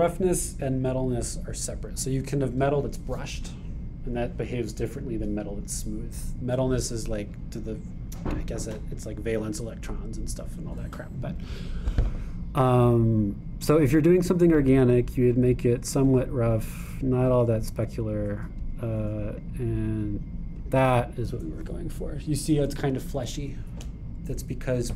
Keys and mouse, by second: 9.4-16.6 drag, 19.6-21.3 drag.